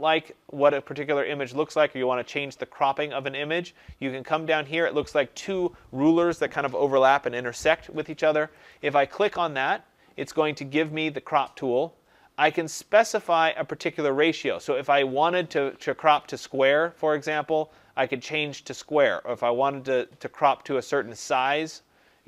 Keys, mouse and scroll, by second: 8.6 click, 12.8 click, 16.1 click, 18.1 click.